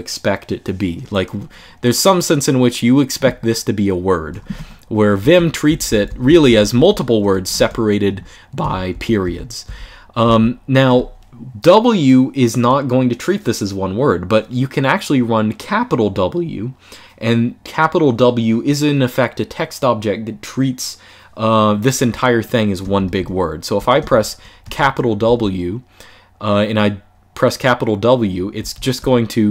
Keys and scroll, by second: 4.3 0, 5.0 Escape, 5.4-6.5 typing, 7.4 Escape, 8.3-10.0 typing, 22.7-25.0 typing, 28.3 shift+w.